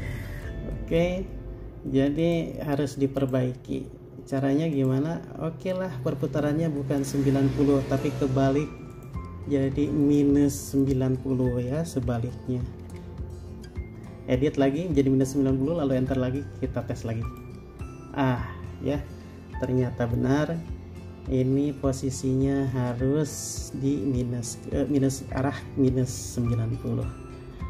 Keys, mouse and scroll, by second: 0.3 middle click, 12.3 typing, 13.1 Return, 20.8 middle click.